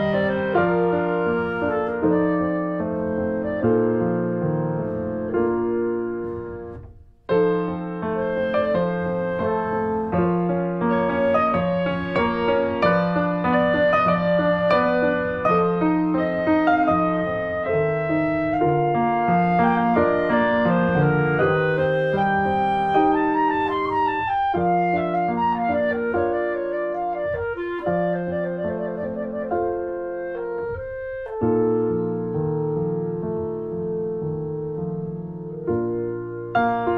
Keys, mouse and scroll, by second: 0.7-1.8 middle drag, 1.8 shift+click, 2.1 shift+middle click, 2.3 scroll down 3, 2.4 shift+middle click, 2.7-3.4 scroll up 1, 3.4 scroll up 1, 3.5 click, 3.6 alt+middle click, 4.0 scroll down 1, 4.2 shift+middle click, 4.3-4.7 shift+scroll up 1, 4.7 click, 5.4 middle click, 5.6-6.8 drag, 6.8 shift+middle click, 7.2-8.4 drag, 8.4 scroll down 1, 8.5 shift+middle click, 8.9-9.6 scroll up 2, 9.1 shift+middle click, 9.6 click, 10.0 shift+middle click, 10.6-11.9 drag, 11.9 shift+middle click, 12.4-13.4 drag, 13.4 scroll down 1, 13.4 shift+middle click, 14.4-17.0 drag, 17.0 middle click, 17.4 scroll down 3, 17.5 middle click, 17.9 scroll up 1, 18.1 shift+middle click, 18.4-19.5 drag, 19.5 middle click, 19.7 ctrl+z, 20.1 click, 20.2 middle click, 20.3 scroll up 1, 20.5 click, 21.3 ctrl+z, 21.7-24.0 drag, 24.0 scroll down 2, 24.1-25.4 shift+middle drag, 25.4-25.8 scroll up 2, 25.8 shift+middle click, 26.5-26.9 scroll down 2, 27.2-27.8 scroll up 3, 27.4 shift+middle click, 27.8 click, 28.3 middle click, 29.1 ctrl+z, 29.5 click, 29.9 middle click, 30.0 scroll up 1, 30.1 shift+middle click, 30.5-31.6 drag, 31.6 shift+middle click, 32.3 shift+click, 32.7 shift+middle click, 32.9 click, 33.7 middle click, 34.0-35.5 drag, 35.5 shift+middle click, 36.1 scroll down 2, 36.2-36.9 shift+middle drag.